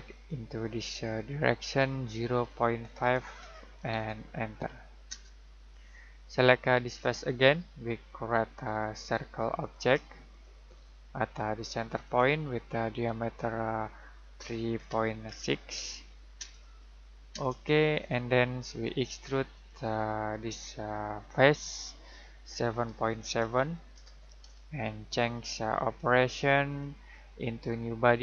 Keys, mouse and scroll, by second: 3.7-4.4 typing, 5.0 Return, 7.0 click, 14.7-16.2 typing, 16.4 Return, 19.5 click, 23.4-24.9 typing.